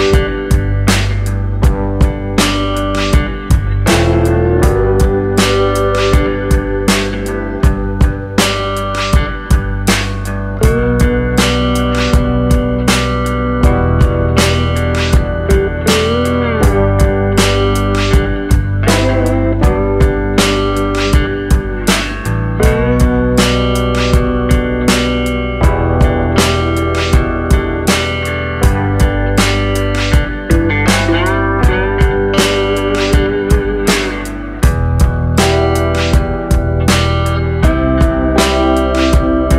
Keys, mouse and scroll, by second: 2.8 ctrl+r, 9.1-9.4 scroll up 3, 9.6 shift+middle click, 10.6 middle click, 17.4 click, 18.6 click, 23.0 middle click, 25.3 Tab, 25.9 Tab, 26.4-27.5 scroll up 2, 28.1 click, 32.6 middle click, 33.8-34.9 scroll down 4, 34.2 middle click, 34.9-35.7 scroll up 2, 35.7 Tab, 36.3 Tab, 38.7 click, 39.1 click.